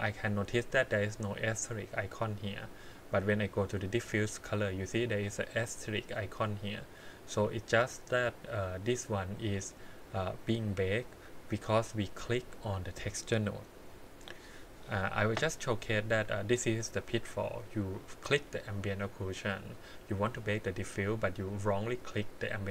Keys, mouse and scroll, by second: 2.9 click, 6.4-9.3 drag, 11.8 click, 12.5 click, 15.7 middle click, 18.2 click.